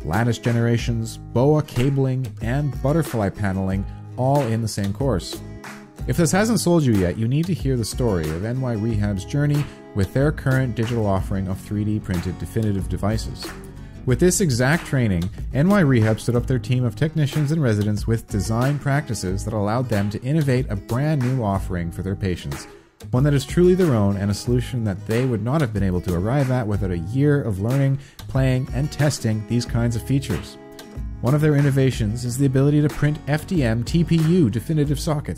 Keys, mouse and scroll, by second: 0.0-0.8 typing, 1.9 Return, 3.3 a.